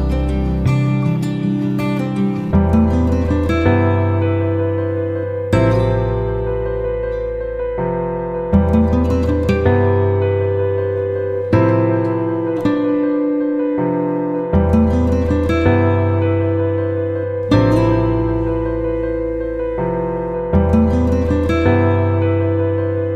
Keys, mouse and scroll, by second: 11.4 ctrl+m, 13.0-17.8 drag.